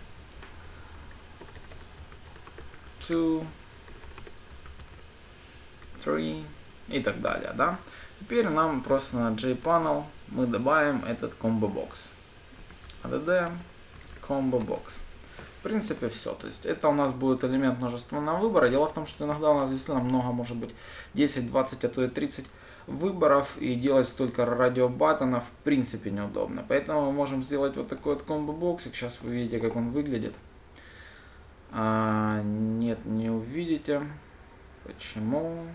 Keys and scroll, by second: 0.1 ctrl+d, 10.3 Return, 29.9 ctrl+shift+F10.